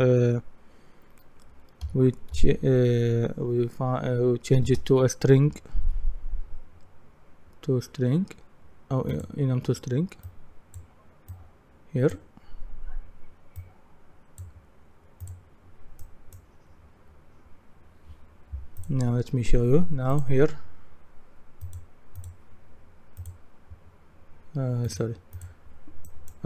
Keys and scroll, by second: 2.1-2.8 typing, 4.6-5.5 typing.